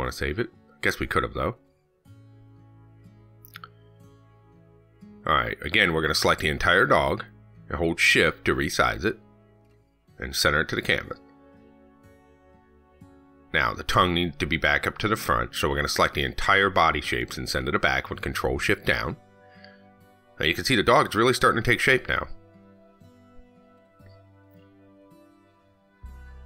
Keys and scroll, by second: 19.1 ctrl+shift+Down.